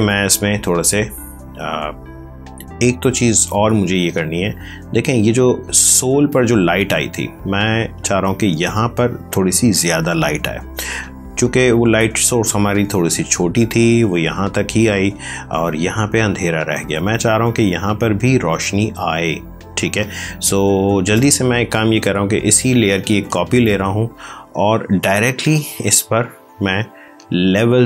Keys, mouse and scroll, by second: 3.5 space, 4.0 click, 4.1 space, 4.5 click, 20.0 space, 22.2 ctrl+j, 24.8 ctrl+l, 27.3 click.